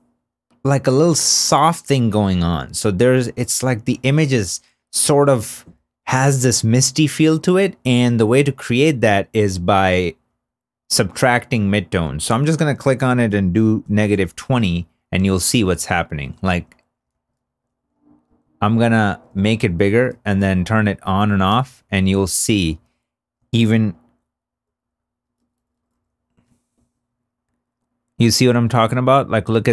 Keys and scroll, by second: 14.0 Return.